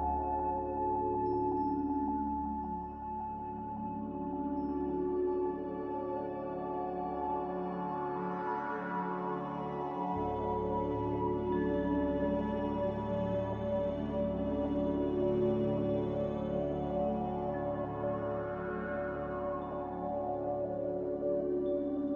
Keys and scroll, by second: 3.1 ctrl+c, 3.5 ctrl+v, 5.8 ctrl+v, 12.9 n.